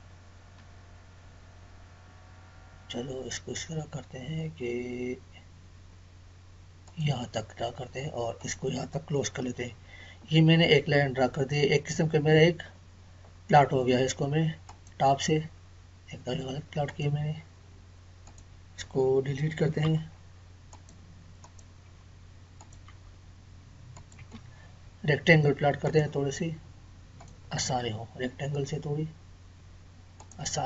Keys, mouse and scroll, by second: 6.9 click, 9.4 space, 12.6 scroll up 1, 14.7 click, 19.8 Delete, 20.7 click, 21.9 Delete, 23.9 click, 24.1 Delete, 25.8 click, 30.1 click.